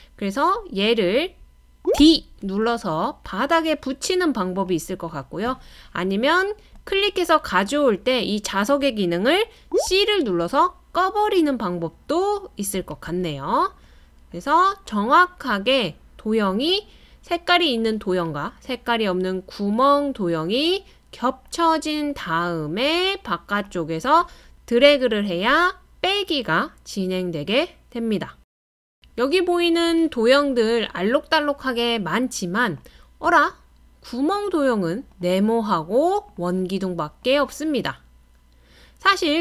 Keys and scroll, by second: 9.6-11.2 typing.